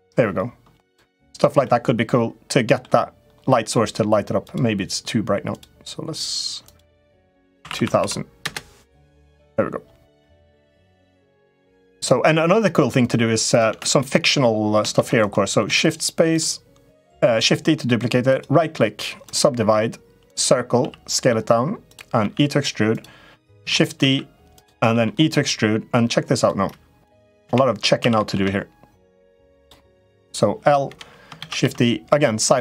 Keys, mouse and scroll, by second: 1.4-2.6 middle drag, 4.2 click, 5.2 click, 6.4-8.9 drag, 7.6 0, 7.7 0, 9.9 middle click, 10.7 middle click, 11.5 click, 12.0 middle click, 12.8 click, 13.5 Tab, 13.6 click, 14.7 shift+d, 15.4 s, 18.0-19.2 right drag, 20.1 click, 20.5 s, 22.0 e, 23.4 shift+d, 23.7 s, 24.7 e, 26.8 click, 27.2 l, 27.9 s, 29.4 s, 30.0 click, 30.6 l, 31.1 shift+d.